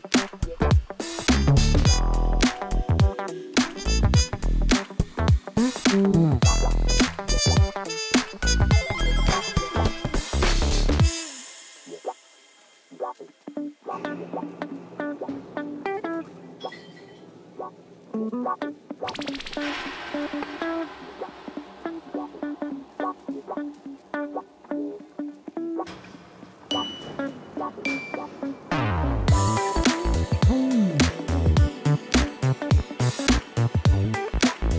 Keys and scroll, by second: 2.4 Tab, 5.2 1, 5.4 shift+z, 7.8 g, 8.4 y, 8.8 1, 9.7 Escape, 10.2 g, 10.3 y, 10.9 3, 11.2 Return, 11.8 Tab, 12.4 Tab, 13.0 g, 13.2 y, 13.2 3, 13.3 Return, 13.5 Tab, 15.2 g, 15.3 y, 15.4 3, 15.5 Return, 15.9 shift+z, 17.9 Tab, 21.8 w, 21.8 a, 22.0 t, 22.2 Return, 22.8 Tab, 28.3-31.3 typing.